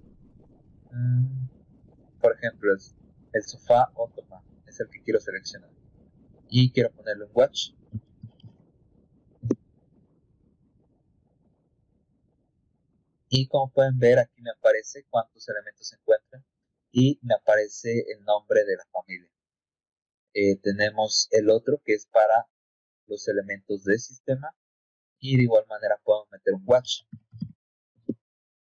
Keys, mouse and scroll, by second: 3.4 click, 6.0 middle click, 8.3 c, 10.8 click, 11.5 click, 11.8 click, 13.7 scroll down 2, 19.0 middle click, 21.5 click, 22.6-24.1 drag, 25.4 scroll down 2, 26.1 right click, 27.0 a.